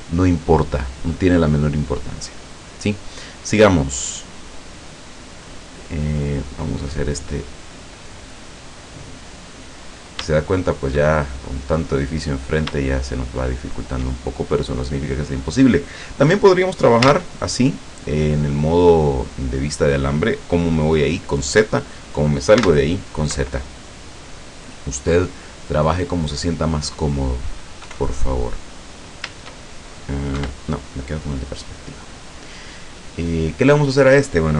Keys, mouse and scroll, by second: 2.6 right click, 4.3 click, 6.2 right click, 6.6-8.5 middle drag, 8.7-9.7 middle drag, 9.8-10.6 scroll up 4, 11.1-12.6 shift+middle drag, 12.6 scroll up 3, 12.8-14.7 shift+middle drag, 14.7 scroll up 2, 15.8-16.2 scroll down 2, 17.1 z, 18.2-20.3 middle drag, 22.6 z, 24.1-25.6 middle drag, 25.7-26.0 scroll up 2, 27.0 scroll down 2, 27.9 KP_5, 28.8-29.2 scroll up 2, 30.4 KP_5, 31.0-31.4 scroll down 2.